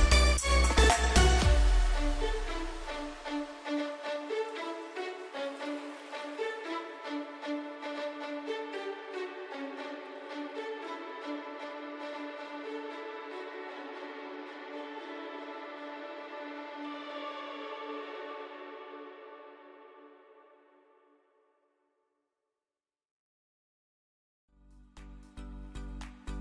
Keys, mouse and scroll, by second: 4.2 Right, 6.6 alt+click, 9.0 t, 9.2 click, 16.0-16.6 typing, 18.4-19.4 typing, 20.8 click, 22.9 Right.